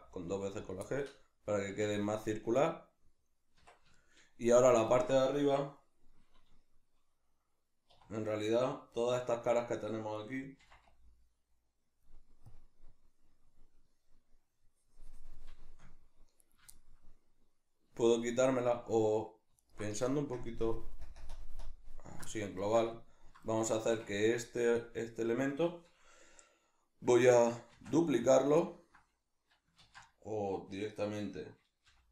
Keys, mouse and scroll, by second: 0.7 click, 0.9-9.6 middle drag, 1.7 Tab, 3.6 Tab, 7.9 3, 9.6 right click, 10.6 c, 16.5 right click, 16.7-19.6 shift+middle drag, 19.6 alt+right click, 20.3 ctrl+KP_Add, 22.6-24.1 ctrl+shift+middle drag, 27.7 shift+d, 28.3 right click, 28.6 ctrl+middle click, 29.8 ctrl+z.